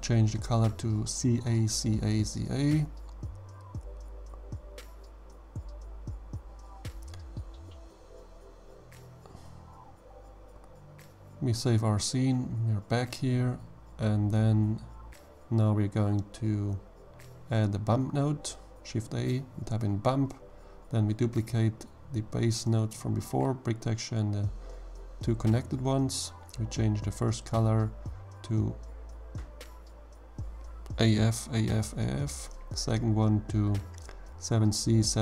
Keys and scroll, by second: 0.1 Return, 16.1 shift+a, 17.0 b, 17.4 u, 17.6 m, 21.0 shift+d, 27.4-29.2 typing, 29.8 Return, 33.7-35.2 typing.